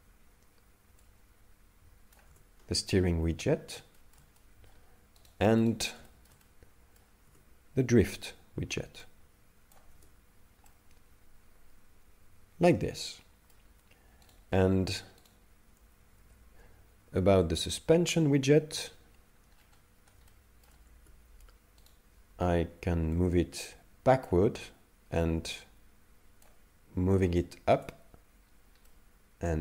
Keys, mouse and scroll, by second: 1.1 click, 2.3 Tab, 4.0 shift+middle click, 4.4 middle click, 5.3 right click, 5.7 right click, 6.1 shift+middle click, 6.4 middle click, 7.3 Tab, 9.1 click, 9.9 Tab, 10.7 middle click, 14.4 right click, 15.3 right click, 16.2 alt+g, 17.4 KP_3, 18.7 KP_5, 19.5 scroll down 1, 19.7-20.3 scroll up 6, 20.3 shift+middle click, 21.0 Tab, 21.8 right click, 23.2 click, 25.5 click, 27.8 Tab, 28.5 scroll down 3, 28.9 middle click.